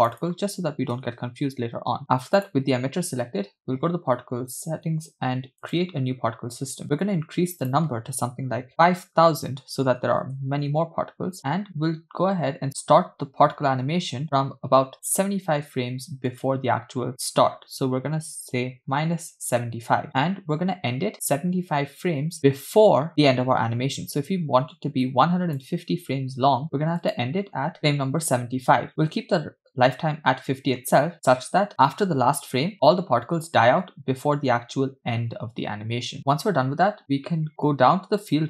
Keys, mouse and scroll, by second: 0.1 click, 0.2-2.0 drag, 2.4 click, 5.7 click, 7.6-10.3 drag, 8.8 0, 8.8 BackSpace, 9.1 0, 11.4-12.5 scroll down 4, 16.3-19.6 drag, 25.1 click, 27.1-28.4 drag, 38.3 click.